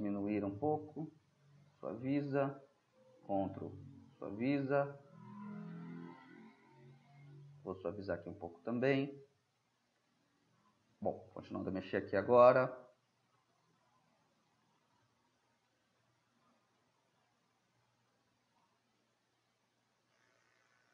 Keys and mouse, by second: 2.3-4.1 middle drag, 2.3-4.1 right drag, 6.4 middle drag, 7.3-10.1 drag, 12.3 [, 12.5 [, 14.6-17.3 drag, 19.3 middle click, 19.5-20.4 middle drag, 20.4-20.9 drag.